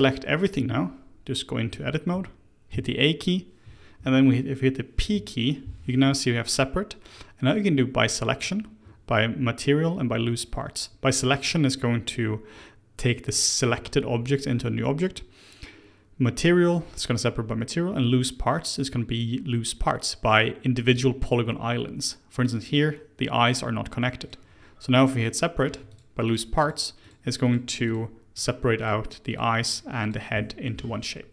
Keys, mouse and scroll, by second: 1.6 Tab, 2.0 Tab, 2.6 a, 4.9 p, 25.6 Tab, 25.8 click, 26.2 click, 26.5 click, 26.9 click, 27.4 click, 27.8 click, 28.2 click, 28.7 click, 29.2 click, 29.6 click, 29.9 click, 30.4-30.7 middle drag, 30.7 Tab, 31.1 middle click.